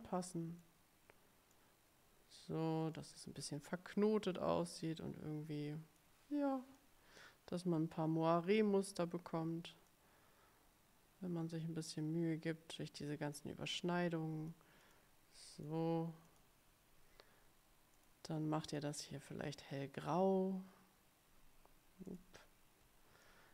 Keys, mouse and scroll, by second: 1.6-3.3 drag, 5.0-6.3 drag, 6.9-8.9 drag, 10.0-14.8 drag, 15.0 click, 15.7 click, 16.4 click, 18.1 click, 18.8 click, 20.1 click, 22.2 shift+click, 23.4-23.5 drag.